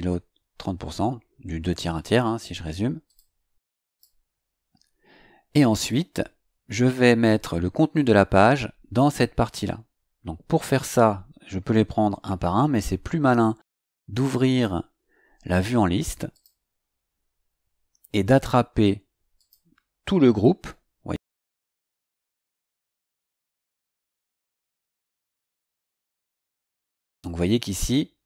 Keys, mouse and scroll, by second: 3.0 click, 3.9 click, 16.3 click, 19.3 click, 22.5-25.8 drag.